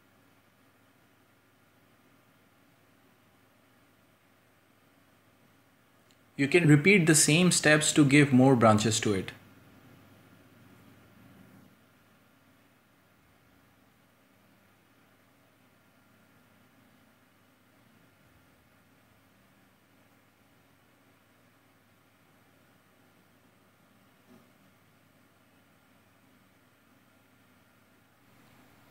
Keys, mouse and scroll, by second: 0.3 middle click, 1.1 scroll down 1, 1.3 shift+middle click, 1.6-1.9 scroll up 1, 2.0 g, 2.8 shift+middle click, 3.2 click, 3.4 c, 3.8 shift+middle click, 4.2 g, 5.1 g, 5.6 shift+middle click, 6.0 scroll down 2, 6.1 middle click, 6.2 Tab, 6.3-7.2 shift+middle drag, 7.2 scroll up 2, 7.3 middle click, 7.4 scroll down 2, 7.5-8.1 shift+middle drag, 8.1 scroll up 1, 8.3 Tab, 8.5 a, 8.6 j, 8.8 k, 14.0 scroll up 2, 14.3 ctrl+r, 14.8 shift+middle click, 15.0 a, 15.1 k, 17.2 shift+right click, 17.3 scroll down 2, 17.5 middle click, 17.6 scroll up 1, 17.9 shift+right click, 18.5 g, 19.0 scroll down 6, 19.2-20.1 shift+middle drag, 20.1 scroll up 3, 20.2 middle drag, 20.5 scroll down 3, 20.5 shift+middle click, 20.9-21.3 scroll up 2, 21.0 Tab, 21.3 right click, 21.8 k, 23.0 shift+middle click, 23.1-23.7 scroll up 2, 23.3 shift+middle click, 23.7 k, 25.1 shift+right click, 25.5 b, 26.3 Tab, 26.5 scroll down 7, 26.6 shift+middle click, 27.0-27.6 shift+middle drag, 28.1 scroll down 1, 28.3 scroll up 1, 28.8 /.